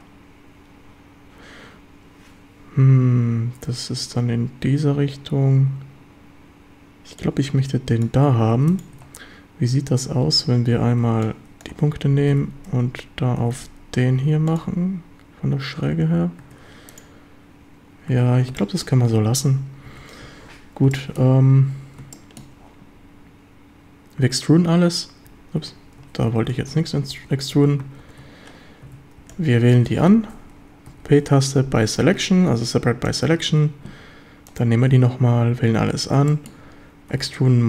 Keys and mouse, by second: 7.2 click, 8.5 Tab, 8.9 Tab, 10.5-12.3 typing, 13.4 x, 14.5 ctrl+click, 16.4 Tab, 18.1 Tab, 18.6 shift+middle click, 19.9 a, 20.2 a, 20.9 shift+drag, 22.1-22.5 shift+drag, 24.2 e, 25.7 Escape, 26.7 ctrl+z, 28.2 ctrl+z, 28.9 a, 29.2 b, 30.9 p, 33.5 Tab, 35.0 Tab, 35.4 a, 36.3 shift+drag, 37.1 e, 37.4 Escape.